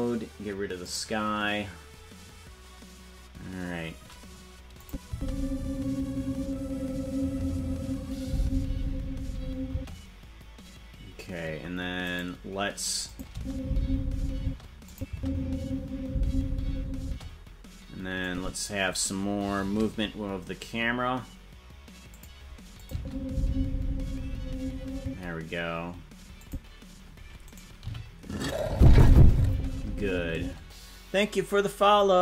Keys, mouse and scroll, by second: 0.9 click, 4.8 click, 5.1 space, 9.7 space, 12.1 right click, 13.1 click, 13.3 space, 14.4 space, 14.9 click, 15.1 space, 17.0 space, 18.2 click, 19.6 shift+`, 22.8-25.3 drag, 22.9 space, 25.0 space, 26.4 click, 27.4 right click, 27.8 g, 28.8 space, 30.4 space.